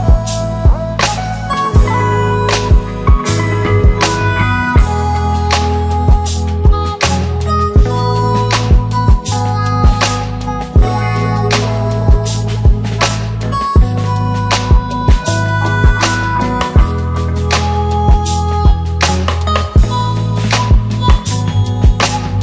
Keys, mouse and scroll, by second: 0.2 space, 4.5 click, 6.1 click, 11.3 space, 13.7 click, 15.4 click, 17.6-18.4 click.